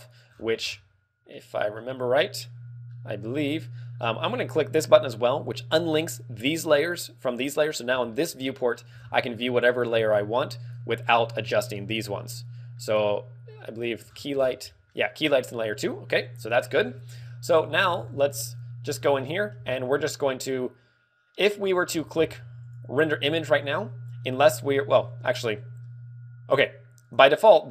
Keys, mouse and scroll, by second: 0.4-1.0 scroll down 7, 1.3 middle click, 3.0 middle click, 5.6 click, 7.7 scroll down 2, 8.3 z, 8.4 middle click, 9.0 scroll down 2, 9.4 middle click, 10.1 shift+middle click, 12.2 scroll down 3, 12.3 middle click, 13.7 click, 14.0-14.5 scroll down 10, 14.7 middle click, 17.4-18.0 scroll up 3, 18.0 ctrl+w, 18.9 scroll up 2, 19.2 click, 19.2 middle click, 19.2 scroll down 10, 19.6-20.1 scroll up 5, 21.6-22.6 scroll up 8, 22.6 click, 23.6 click, 27.1 click.